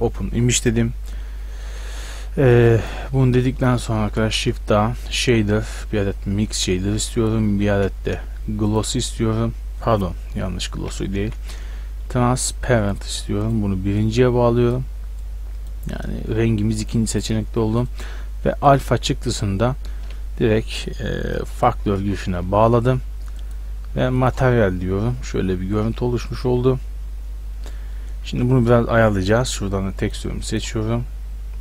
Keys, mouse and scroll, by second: 0.0-1.7 drag, 2.7-4.1 drag, 4.1 shift+a, 5.2 click, 7.3-8.7 drag, 7.7 shift+a, 8.8-9.2 drag, 10.8 x, 11.2 shift+a, 14.0-14.7 drag, 18.1-19.3 drag, 21.2-23.4 middle drag, 25.2-28.3 middle drag, 28.3 Tab, 29.2-30.0 middle drag.